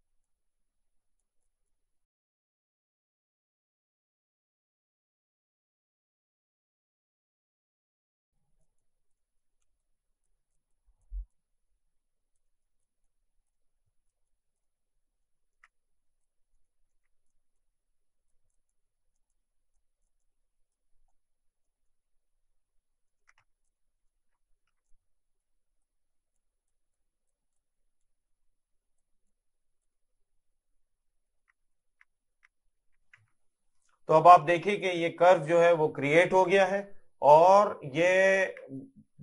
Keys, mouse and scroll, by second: 2.4 middle click, 3.3 Tab, 3.4-4.1 scroll down 2, 3.7 middle click, 4.1 middle click, 4.3 middle click, 5.0 middle click, 5.4 scroll up 1, 5.8 middle click, 6.5 scroll up 1, 6.7 shift+middle click, 6.9 click, 7.3 Tab, 7.5 click, 8.2 middle click, 8.8 click, 9.2 middle click, 9.8 click, 12.5 middle click, 12.8 click, 13.6 middle click, 14.7 middle click, 16.1 middle click, 16.9 scroll up 1, 16.9 middle click, 17.3 click, 21.1 middle click, 23.7 click, 23.8 middle click, 24.1 scroll up 1, 24.3 Caps_Lock, 24.8 Tab, 25.5 click, 30.0 middle click, 31.6 middle click, 32.1 scroll down 1, 32.3 middle click, 32.5 middle click, 32.8 middle click, 33.8 middle click, 35.9 middle click, 36.9 middle click, 38.0 shift+middle click, 38.8 middle click.